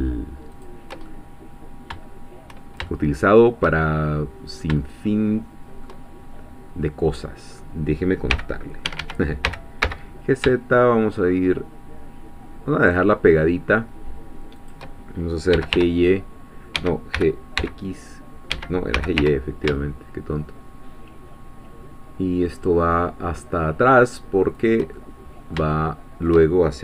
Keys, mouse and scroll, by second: 0.5 shift+click, 1.1-2.1 shift+middle drag, 2.1-2.9 shift+scroll up 1, 2.9-6.4 shift+middle drag, 6.8-8.3 middle drag, 8.3 f, 8.9 Escape, 9.4 g, 9.8 z, 14.6 shift+click, 15.5 g, 15.7 y, 16.7 Escape, 17.1 g, 17.6 x, 18.5 Escape, 18.9 g, 19.2 y, 24.6 shift+click, 25.1-26.5 shift+middle drag.